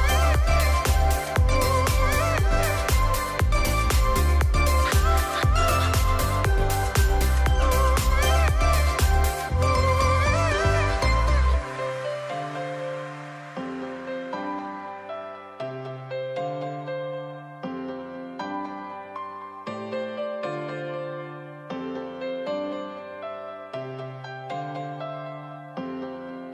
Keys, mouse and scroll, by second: 1.4 ctrl+shift+a, 7.3-14.2 drag, 18.6 alt+Num_Lock, 18.8-20.9 alt+drag, 21.2-24.6 drag, 24.8-26.5 alt+scroll up 3.